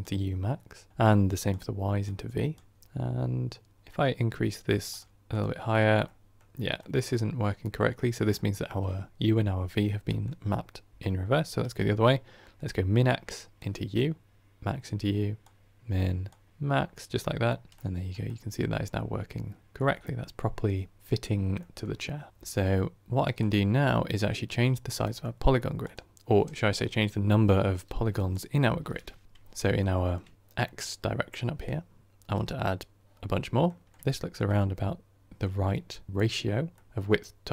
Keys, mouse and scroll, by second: 2.7-4.9 middle drag, 4.9-5.9 drag, 5.9-11.7 middle drag, 11.7-13.6 ctrl+right drag, 13.6-17.4 drag, 17.4-23.3 middle drag, 23.3-29.7 drag, 29.7-31.6 middle drag, 31.6-33.2 drag, 33.2-37.5 middle drag.